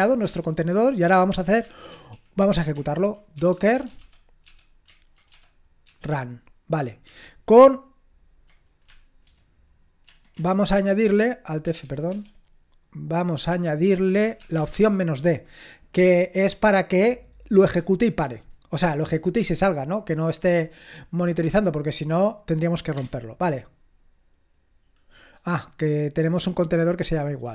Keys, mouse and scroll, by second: 0.2 ctrl+l, 1.9 ctrl+r, 3.2-5.9 typing, 9.2 alt+b, 10.0 alt+b, 12.1 alt+b, 22.9 Return.